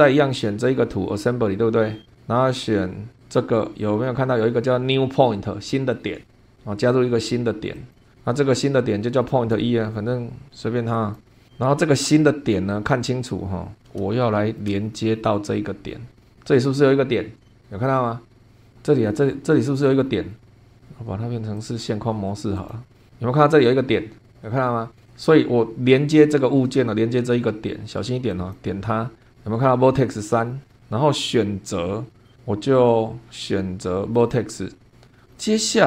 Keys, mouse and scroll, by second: 3.2 click, 7.8 click, 10.9 click, 12.8-13.1 scroll up 2, 13.3-13.8 scroll up 2, 14.2-14.8 shift+middle drag, 18.4 scroll up 4, 19.1-19.4 scroll down 2, 19.7 scroll down 2, 20.3-20.7 scroll down 3, 20.7 scroll up 2, 21.5 click, 22.5 click, 22.9 scroll up 2, 28.3 click, 30.4 scroll down 1, 30.8-32.3 middle drag, 34.1 click, 35.3-35.6 scroll down 2.